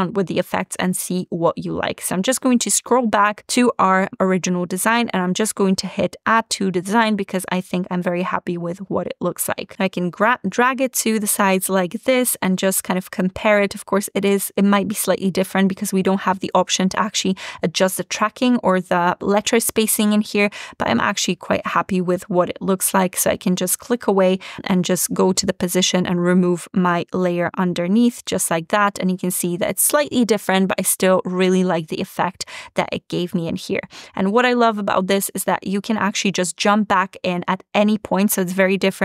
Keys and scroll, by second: 27.8 BackSpace.